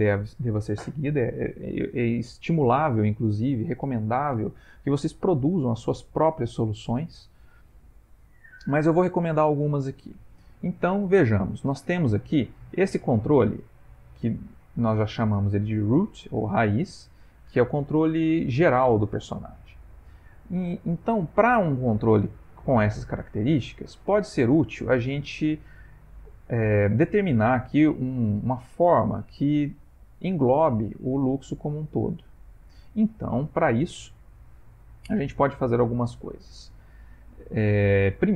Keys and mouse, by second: 8.7 middle click, 9.9 middle click, 10.8 shift+middle click, 11.4 ctrl+middle click, 13.1 click, 19.8 middle click, 22.7 ctrl+middle click, 24.1 middle click, 33.7 middle click, 35.7 middle click.